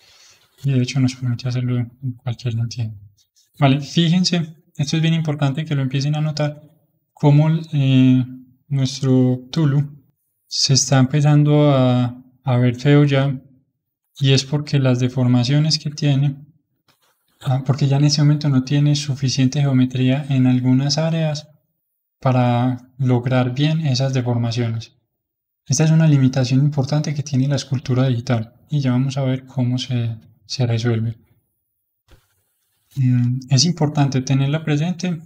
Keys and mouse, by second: 2.7-14.8 middle drag, 14.8 Tab, 15.5-23.7 middle drag, 23.7-32.2 middle drag, 32.2 Tab, 33.7-35.2 middle drag.